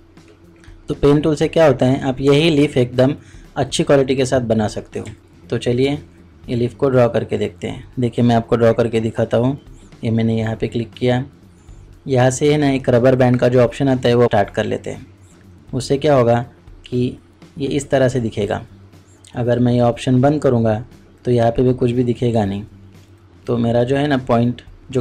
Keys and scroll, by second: 5.1 ctrl+space.